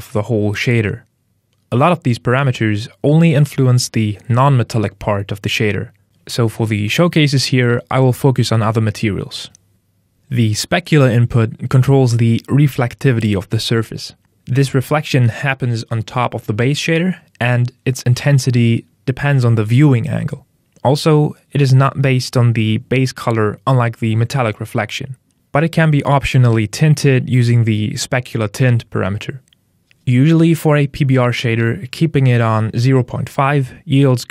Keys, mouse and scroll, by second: 11.6 click, 24.1 click, 28.3 click, 31.3 click.